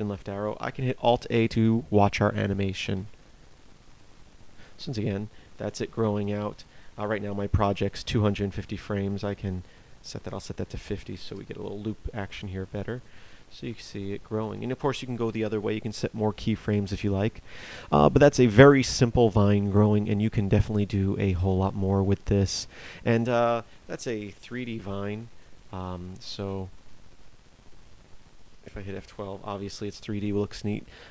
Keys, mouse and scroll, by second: 2.9 alt+a, 24.0 Escape, 25.1 Right, 25.3 Right.